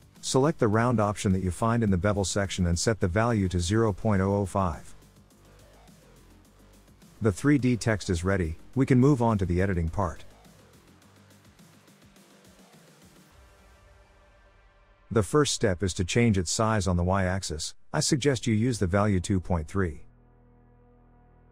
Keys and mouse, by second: 0.7-2.1 drag, 4.4-7.6 drag, 6.3 0, 10.1 click, 10.2 middle click, 10.3 click, 10.3 middle click, 10.5-11.9 drag, 13.2-14.3 drag, 17.8-21.5 drag.